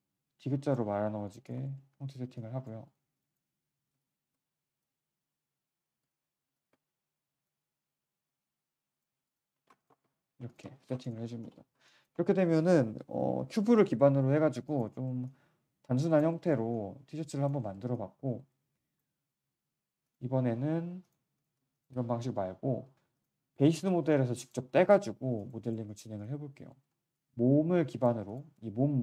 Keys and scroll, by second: 0.9 5, 9.0 q, 9.5 3, 11.3 shift+6.